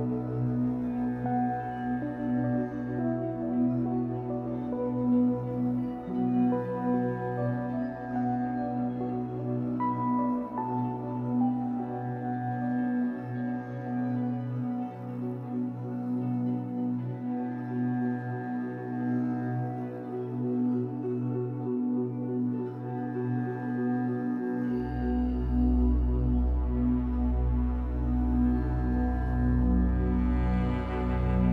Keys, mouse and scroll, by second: 0.7-1.1 scroll up 6, 1.1-3.8 shift+middle drag, 3.8 Tab, 4.3 middle click, 4.9 scroll up 3, 5.4 Tab, 5.9 Tab, 6.4 1, 6.6 click, 7.2 alt+middle click, 7.8 alt+middle click, 8.2 shift+middle click, 8.7 shift+d, 9.2 shift+middle click, 9.4-10.0 scroll up 2, 10.0 p, 10.5 Tab, 10.9 z, 11.4 click, 11.9 g, 13.5 click, 15.0 Tab, 15.5 a, 15.8 g, 17.3 Tab, 17.7 o, 19.0 g, 19.8 Tab, 20.1 a, 20.3 scroll up 1, 20.5 g, 22.2 g, 22.5 e, 23.1 e, 23.7 e, 24.9-29.7 typing.